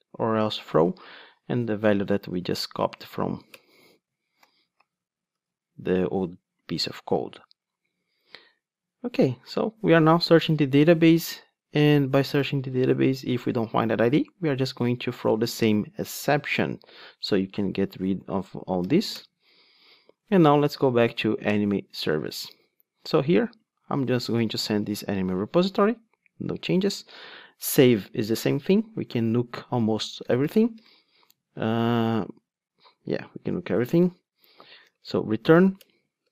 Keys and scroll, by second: 0.6 ctrl+Tab, 0.9 Return, 0.9 super+v, 4.3 alt+super+l, 18.9 alt+Return, 20.7 ctrl+Tab, 24.8 Return, 31.3 super+z.